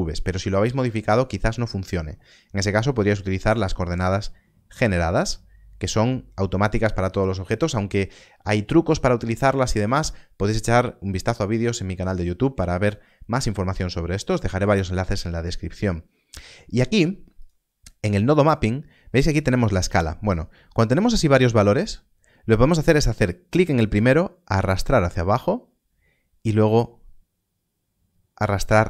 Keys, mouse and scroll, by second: 3.0 click, 13.0 middle click, 17.3 middle click, 17.4 click, 20.2 scroll up 1, 23.4 click.